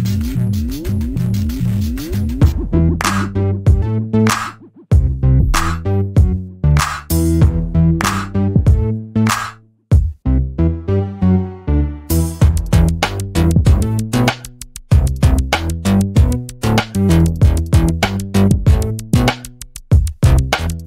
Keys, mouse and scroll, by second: 0.1 alt+middle click, 1.9 click, 2.4-3.1 scroll down 1, 3.1 BackSpace, 3.8-4.5 scroll up 1, 4.5 click, 4.8 BackSpace, 5.1-5.8 scroll down 1, 5.8 click, 6.1 BackSpace, 6.5-7.3 scroll up 1, 7.3 BackSpace, 7.8-8.2 scroll up 1, 8.2 click, 8.6 BackSpace, 10.7 click, 11.0 BackSpace, 11.5-12.0 scroll down 1, 12.2-13.7 scroll up 1, 13.7-14.2 scroll down 1, 15.3 click, 20.4 alt+middle click.